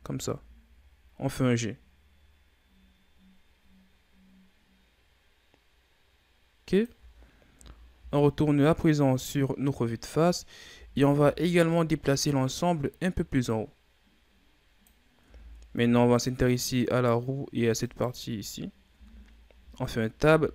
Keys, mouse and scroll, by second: 7.5 KP_1, 7.8 z, 8.9-10.6 scroll down 1, 10.6 a, 11.1 a, 12.2-15.2 drag, 15.2 Tab, 15.7-16.8 scroll down 2, 16.8 right click, 17.7 shift+right click, 18.4-18.8 scroll up 1, 18.8 Tab, 19.5 a, 20.2 a.